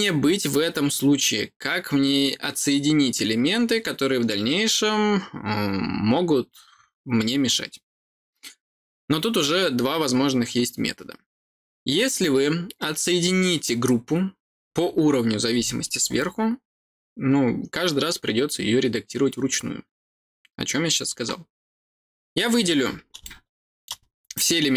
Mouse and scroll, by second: 0.6-7.5 scroll down 1, 7.5-12.0 scroll down 1, 12.0-14.8 scroll down 1, 14.8-18.0 scroll down 1, 18.0-22.2 scroll down 1, 22.2-22.7 scroll down 3, 23.1 middle click, 24.3 click.